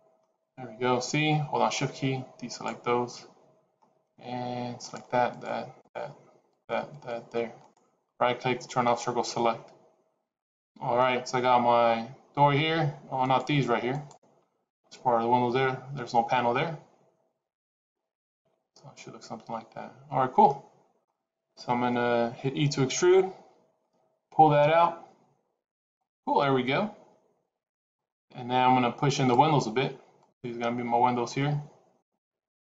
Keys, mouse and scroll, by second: 0.8 c, 8.0-10.1 scroll down 3, 8.5 middle click, 13.1 shift+click, 13.8 shift+click, 20.4 middle click, 23.8 e, 26.2 middle click, 29.0 click, 30.0 shift+click, 31.9 click.